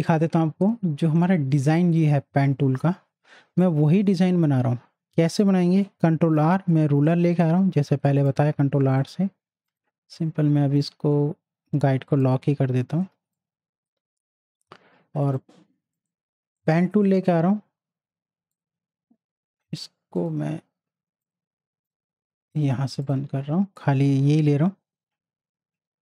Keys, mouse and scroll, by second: 3.6 right click, 5.3 click, 6.1 ctrl+r, 7.4-9.7 drag, 9.7 right click, 12.2 click, 13.0 z, 13.3-16.0 drag, 16.0 right click, 16.6 click.